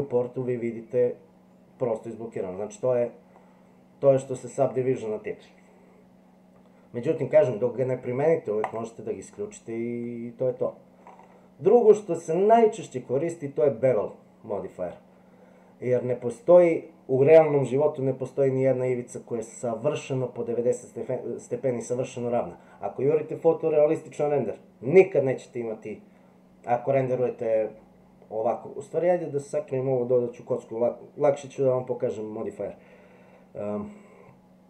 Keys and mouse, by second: 3.4-4.2 middle drag, 8.7 click.